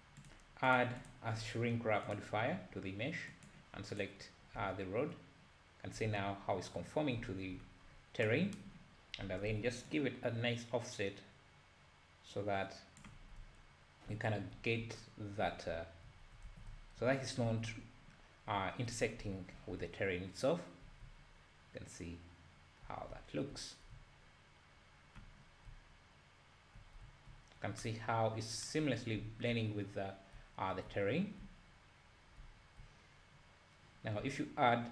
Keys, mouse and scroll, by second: 2.2-3.6 drag, 4.6 `, 7.2 `, 7.9-8.2 scroll up 2, 10.1-13.4 shift+drag, 13.4 `, 14.5 `, 15.7 `, 16.5 alt+a, 16.7 `, 17.4 `, 19.2 `, 19.8 `, 25.4 scroll down 1, 25.7 `, 27.0 `, 27.6 scroll up 1, 29.2 `, 30.3 `, 31.4 `, 32.0 `.